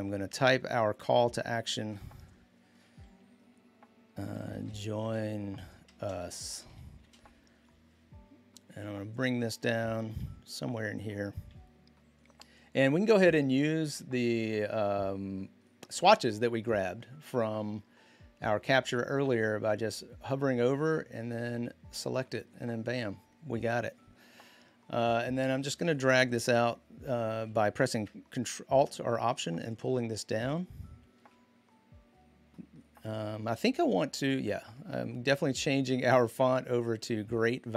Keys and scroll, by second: 3.9-7.2 typing, 9.5-10.2 typing.